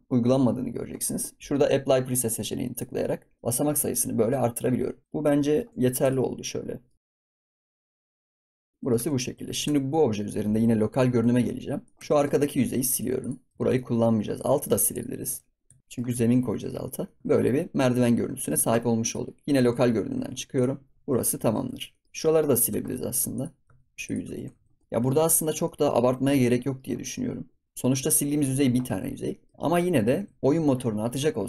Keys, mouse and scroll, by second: 2.6 click, 3.3 scroll down 3, 3.4-4.4 middle drag, 4.4 scroll down 3, 4.7 scroll up 5, 5.0 middle click, 5.7 Tab, 5.8-6.3 scroll down 6, 6.0 drag, 6.4-6.9 middle drag, 6.9 click, 7.0 s, 7.3 s, 7.8 click, 7.9 scroll down 1, 8.0 ctrl+s, 8.1 middle click, 8.2 ctrl+s, 8.3 shift+middle click, 8.4 ctrl+s, 8.5 scroll down 1, 8.5 middle click, 8.7 scroll up 2, 8.9 Tab, 9.4 ctrl+s, 9.6 Tab, 10.1 middle click, 10.9 KP_Divide, 11.8 middle click, 11.9 Tab, 12.8 click, 13.1 click, 13.5 middle click, 13.6 ctrl+s, 13.7 middle click, 14.3 click, 14.6 x, 15.2 scroll down 1, 15.6 Tab, 15.8-16.1 middle drag, 16.1 ctrl+s, 16.2 scroll up 3, 16.4 scroll down 3, 16.8-17.2 shift+middle drag, 17.2 ctrl+s, 17.5 scroll down 1, 17.7-19.0 middle drag, 19.0 click, 19.6 KP_Divide, 20.1 ctrl+s, 20.5 click, 20.8 scroll down 2, 20.9 scroll up 6, 21.2-21.5 shift+middle drag, 21.5 ctrl+s, 21.6 scroll down 3, 21.9 middle drag, 22.0 click, 22.2-22.6 middle drag, 22.6 Tab, 23.3 click, 23.6 x, 24.2 Tab, 24.5 ctrl+s, 24.6 scroll down 1, 24.8 click, 24.8 middle click, 24.8 scroll up 3, 25.1 shift+middle drag, 25.3 scroll down 2, 25.6-26.3 middle drag, 26.3 scroll down 2, 26.6-28.9 middle drag, 28.9 ctrl+s, 29.3 middle drag, 29.5 ctrl+s, 29.9 middle drag, 30.1 ctrl+s, 30.2 scroll down 2, 30.4-31.4 middle drag.